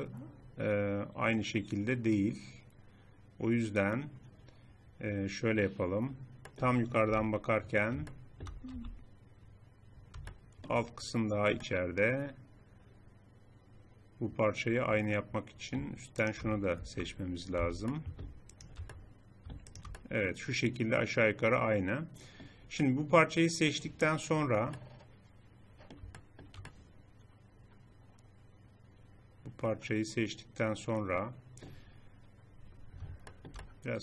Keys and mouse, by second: 6.5 middle click, 7.1 KP_7, 8.8 z, 13.2 click, 13.4-16.2 middle drag, 16.2-17.6 drag, 17.6 z, 22.5 middle click, 26.2-28.6 drag.